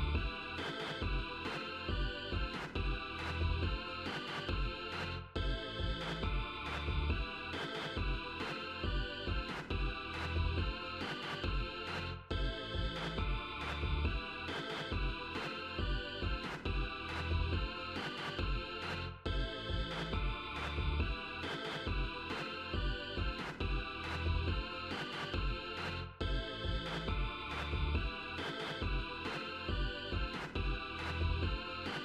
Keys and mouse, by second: 7.6 click, 12.5 click, 13.1 click, 13.7 click, 18.8 click, 28.4 click.